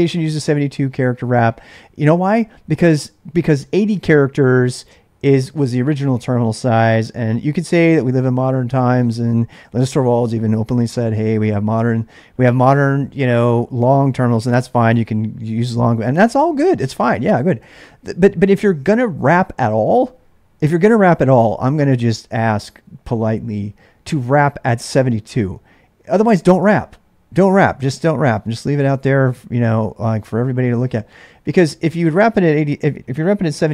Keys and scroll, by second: 31.9 ctrl+[, 32.0 ctrl+j, 32.1 k, 33.1-33.7 typing.